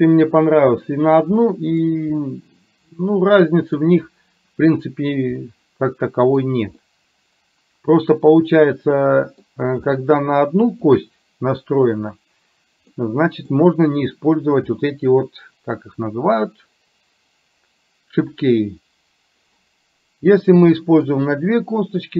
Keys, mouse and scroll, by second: 1.6-4.0 middle drag, 5.6-9.6 middle drag, 10.0-11.4 middle drag, 13.1 middle click, 21.0 middle click.